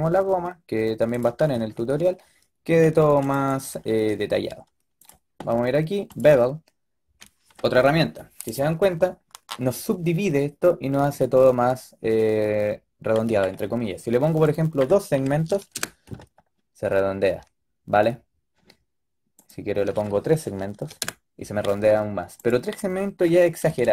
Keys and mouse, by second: 3.4-9.1 drag, 14.5-23.9 drag.